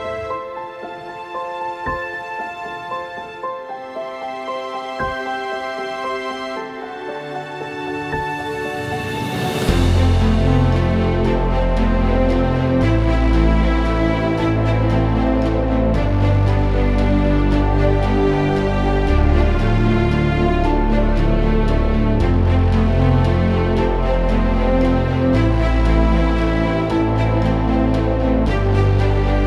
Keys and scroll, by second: 0.0-0.2 typing, 15.6-20.0 typing, 24.3-27.6 typing.